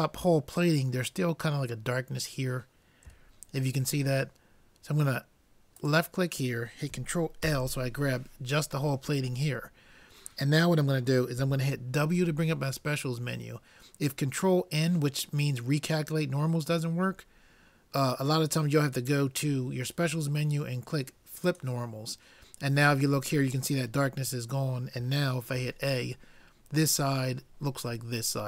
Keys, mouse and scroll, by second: 2.0 middle click, 3.3-5.0 middle drag, 5.8-7.5 drag, 7.5 ctrl+l, 12.0 w, 25.6 a.